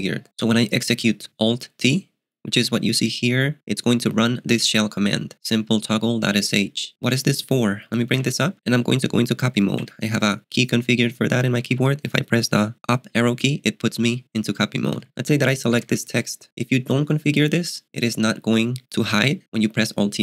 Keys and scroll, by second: 8.2 alt+t, 9.8 ctrl+b, 9.8 [, 11.0-12.2 typing, 14.7-16.4 typing, 19.4 alt+t.